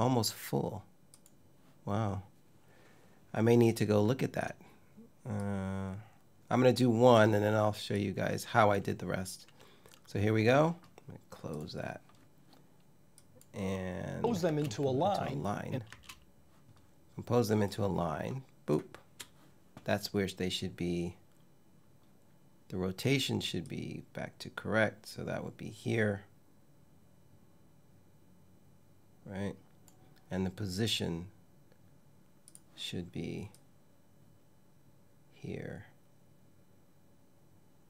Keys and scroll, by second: 14.1 space, 15.5 space.